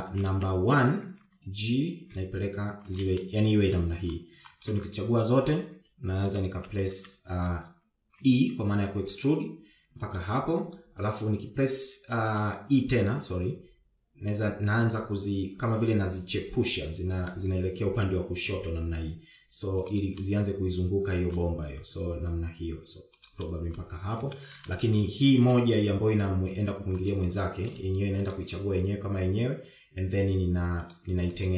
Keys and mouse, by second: 1.3 KP_3, 1.7 KP_1, 2.9 g, 4.7 middle click, 6.1 shift+click, 8.0 KP_1, 8.4 KP_3, 9.8 e, 12.2 r, 14.5 e, 19.1 e, 21.7-22.9 middle drag, 23.1 g, 25.0 middle click, 25.9 shift+middle click, 26.6 KP_1, 27.1 KP_2, 28.6 click, 28.6 KP_3, 28.8 g, 29.8 click, 30.1 g.